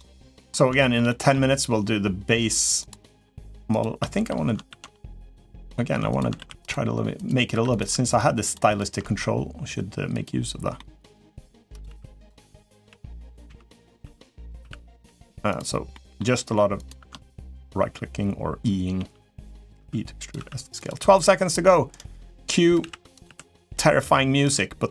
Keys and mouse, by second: 0.5 shift+middle click, 0.8 middle click, 2.6 click, 3.0 middle click, 3.4 click, 4.4 ctrl+r, 6.1 ctrl+r, 7.3 3, 7.5 click, 7.9 shift+click, 8.2 shift+click, 8.4 shift+click, 10.5 middle click, 11.1-14.8 typing, 15.7 middle click, 16.2 r, 17.2 ctrl+right click, 18.7 g, 19.5 e, 20.9 e, 20.9 s, 22.6 s, 23.0 r, 23.5 g.